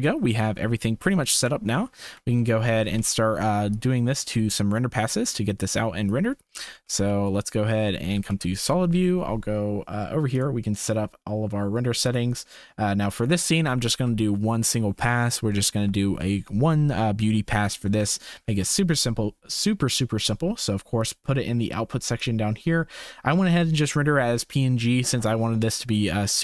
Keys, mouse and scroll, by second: 0.1 shift+middle click, 1.4 Tab, 2.3 shift+middle click, 3.4 ctrl+s, 3.8-6.2 drag, 7.3 ctrl+s, 7.3 z, 8.4 ctrl+s, 10.3 click, 12.0 click, 14.2 ctrl+s, 15.5 shift+middle drag, 18.0 shift+middle click, 18.8 ctrl+s, 20.9 click.